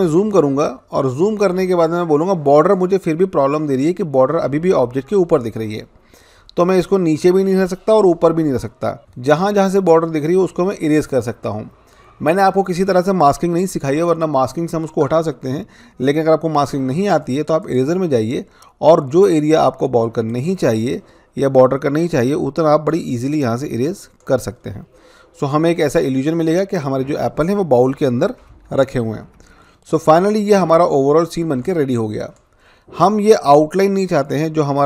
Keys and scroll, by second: 29.1 ctrl+-.